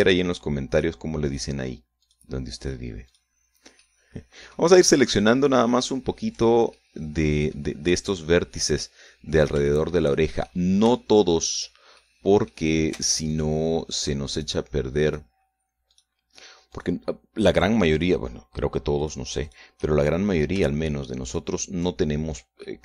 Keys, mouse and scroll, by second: 0.4 shift+right click, 1.3 shift+right click, 1.8 shift+right click, 2.6 shift+right click, 3.2 shift+right click, 3.6 shift+right click, 4.3 shift+middle click, 7.2-8.2 shift+middle drag, 9.3 middle click, 10.2 shift+middle click, 12.5 shift+middle click, 13.8 alt+shift+right click, 14.9 alt+shift+right click, 15.6 shift+right click, 16.4 shift+right click, 17.2 shift+right click, 18.0 shift+right click, 18.5 shift+right click, 19.6 shift+right click, 20.0 shift+right click, 20.4 shift+middle click, 21.8 shift+right click.